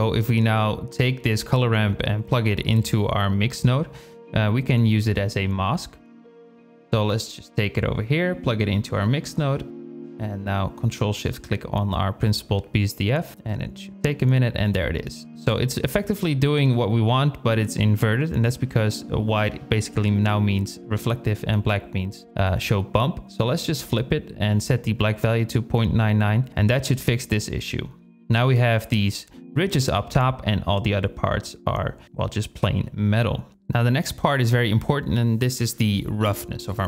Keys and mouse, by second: 5.4 shift+click, 7.6-10.1 drag, 11.3 shift+click, 13.1 ctrl+shift+click, 15.0 shift+click, 21.9-23.9 drag, 25.5-26.7 drag, 25.9 KP_9, 28.2 drag, 29.8 drag, 34.9 shift+click, 35.6-36.2 drag, 36.3-36.8 drag.